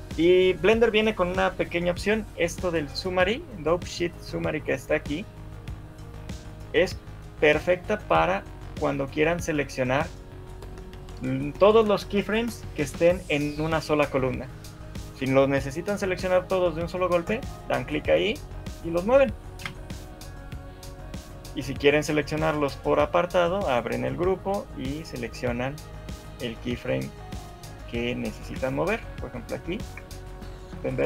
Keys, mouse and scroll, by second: 6.5 click, 7.5 click, 8.7 click, 9.7 click, 10.7 click, 17.3 click, 18.2 g, 24.0 click, 25.4 click, 28.4 g, 29.6 click, 30.4 g.